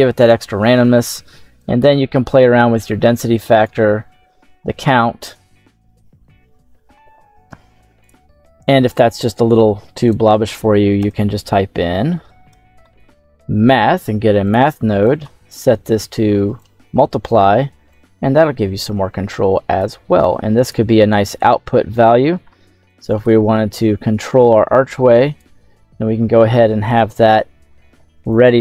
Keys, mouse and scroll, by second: 1.5-3.6 drag, 6.3 middle click, 6.3-6.6 scroll down 1, 7.9 ctrl+z, 7.9 ctrl+x, 7.9 right click, 9.9-10.9 right drag, 10.9 space, 15.4-16.5 drag, 17.8-19.7 drag, 20.1 click, 21.7-22.8 scroll down 1, 22.8 click, 22.8-23.1 scroll down 1, 24.1-25.3 drag.